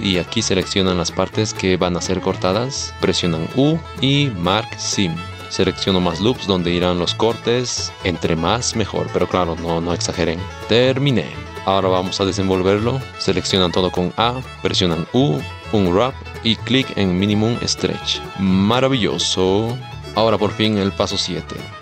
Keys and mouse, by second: 1.6-2.9 drag, 12.3-21.8 middle drag.